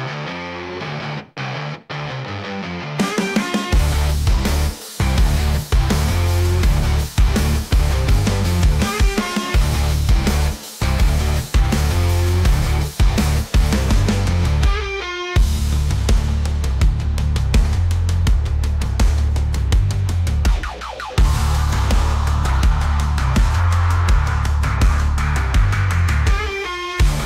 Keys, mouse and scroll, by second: 0.1 scroll down 3, 0.4 scroll up 1, 1.1 s, 4.9 s, 10.0 middle click, 11.0 `, 11.8 s, 13.1-14.7 middle drag, 14.8 s, 20.0 r, 21.8 g, 24.9 scroll up 4, 25.1 shift+middle click, 25.5 scroll up 1, 25.7-26.2 shift+middle drag, 26.2 g.